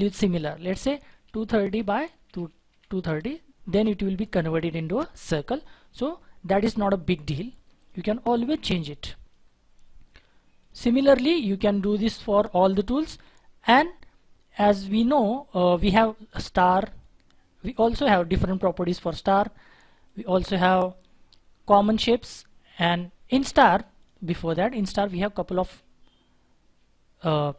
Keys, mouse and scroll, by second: 0.9-2.6 typing, 1.5 Tab, 3.0 Return.